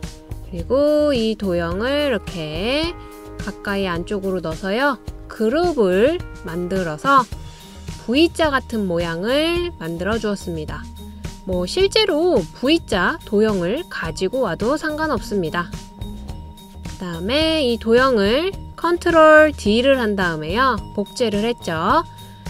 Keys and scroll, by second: 19.7 super+d.